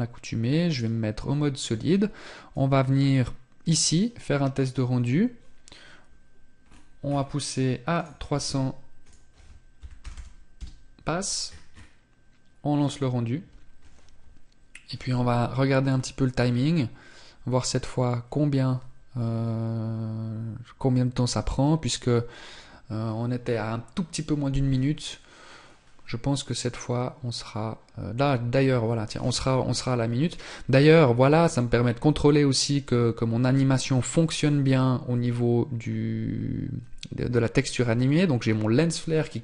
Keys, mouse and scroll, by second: 5.7 scroll down 1, 6.3-7.1 scroll down 8, 7.1 click, 8.1 click, 9.3 KP_0, 10.6 scroll up 4, 11.7 scroll up 6, 11.9 click.